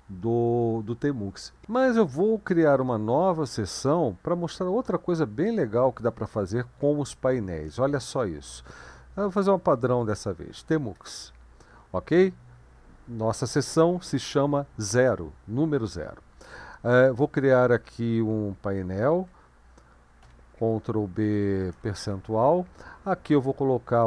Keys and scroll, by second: 9.1-10.6 typing, 11.0 Return, 20.3 ctrl+b, 21.7 typing, 23.7-24.0 typing.